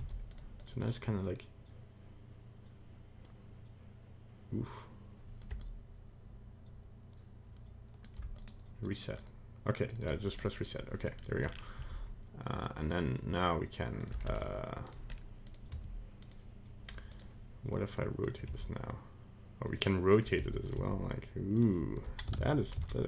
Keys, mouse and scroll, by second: 0.6 right click, 3.2 click, 5.6 shift+click, 8.3 click, 9.2 click, 9.9 click, 10.1 click, 10.4 middle click, 11.0 right click, 11.2 middle click, 11.4-11.7 scroll down 4, 11.7 g, 14.2 r, 15.1-15.4 scroll up 2, 15.4 right click, 15.7 r, 17.1 right click, 17.9 click, 18.4 r, 20.3 g, 20.7 r, 22.6 ctrl+z, 22.9 ctrl+z.